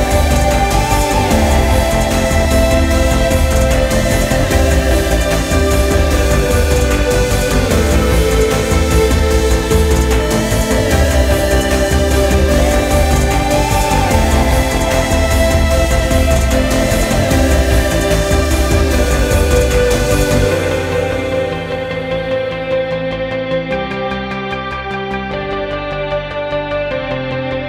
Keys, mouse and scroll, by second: 2.8-6.9 drag, 9.3 click, 14.7 shift+a, 19.0 s, 27.0-27.6 middle drag.